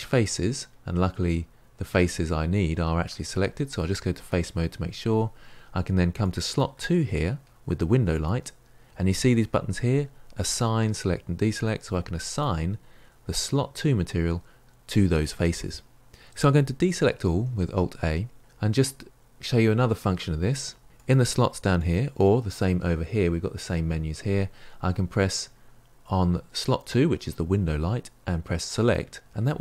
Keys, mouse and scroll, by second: 3.0-4.1 scroll up 1, 4.1 click, 8.0-12.3 drag, 17.5 alt+a, 26.5 click, 28.8-29.6 drag.